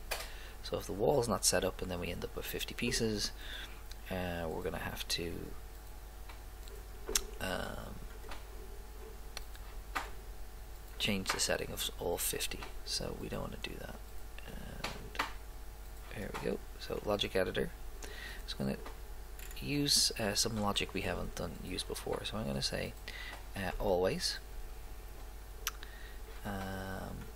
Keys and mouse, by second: 1.6 click, 2.1 click, 5.4 click, 22.4 click, 26.5-27.3 drag.